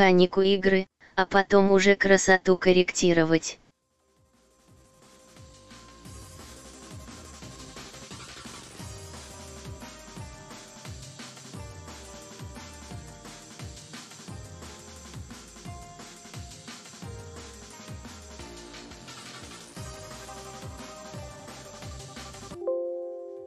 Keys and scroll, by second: 0.2 Return, 7.4 Return.